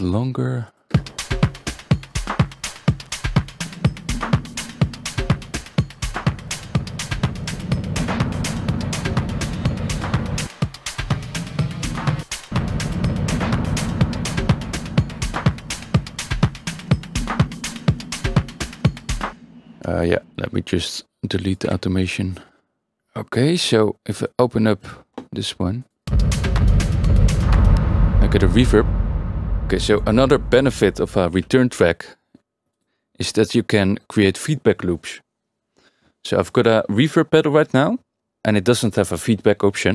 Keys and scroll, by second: 0.9 space, 19.3 space, 21.6 Delete, 23.0 a, 26.0 space, 27.7 space, 29.0 Tab.